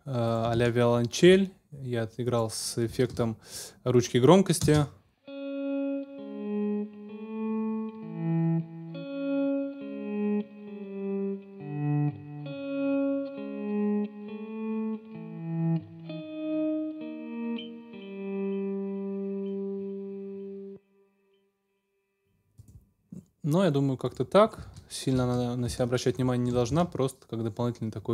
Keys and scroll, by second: 3.1 super+s, 4.6 space, 20.6 space, 24.7 super+s, 25.7 ctrl+alt+super+s, 26.7 ctrl+alt+super+s, 27.3 super+s.